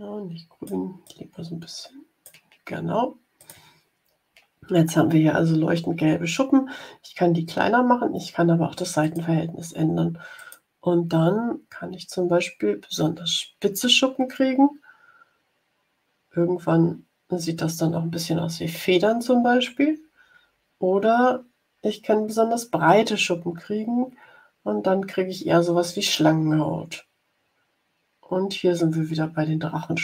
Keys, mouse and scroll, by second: 1.0-2.4 drag, 3.3 click, 9.0 click, 10.3 click, 10.8 scroll up 1, 12.4 scroll up 1, 13.2 scroll up 1, 13.8 scroll up 1, 16.1 scroll up 1, 16.8 scroll up 2, 19.9-21.1 scroll down 2, 21.1-21.8 scroll down 4, 22.2 scroll down 2, 26.6 scroll up 2, 27.4 scroll up 2.